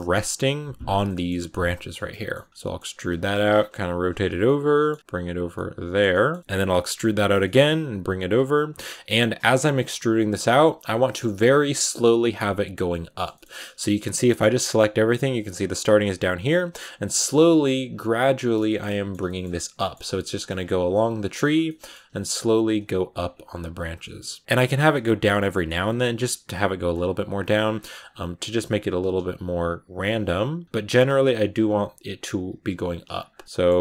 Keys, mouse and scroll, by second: 0.9 middle click, 1.4 scroll down 2, 1.5 middle click, 2.4 e, 2.5 shift+middle click, 2.8 r, 3.8 g, 4.2 scroll down 1, 4.3 middle click, 4.8 scroll up 1, 4.8 g, 5.4 middle click, 6.3 scroll down 1, 6.4 middle click, 6.8 g, 7.3 middle click, 7.9-10.7 typing, 8.7 middle click, 11.2-11.8 scroll down 6, 11.8-13.3 middle drag, 13.3 scroll up 2, 13.5 middle click, 13.8 a, 13.9 a, 14.3-17.7 middle drag, 17.7-18.2 scroll up 1, 18.2 right click, 18.4 shift+middle click, 19.3 scroll up 2, 19.6 middle click, 20.0 g, 20.3 r, 20.6 g, 20.9 e, 21.5 middle click, 21.9-24.5 typing, 24.0 middle click, 25.2 middle click, 25.6-29.7 typing, 30.1 middle click, 30.6 scroll down 1, 30.8-33.0 typing, 33.4 middle click.